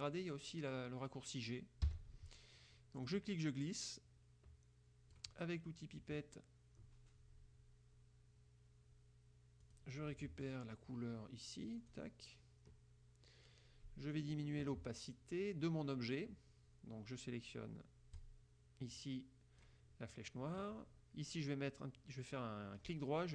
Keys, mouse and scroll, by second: 1.9 g, 3.1-5.5 drag, 9.8 click, 11.9 click, 18.3-19.9 drag, 23.0 right click.